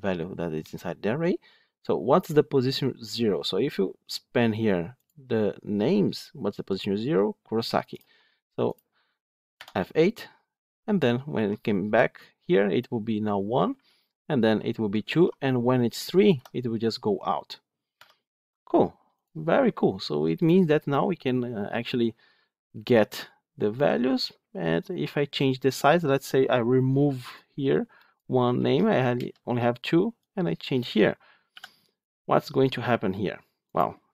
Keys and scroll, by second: 9.5 F8, 10.6 F8, 17.8 F9.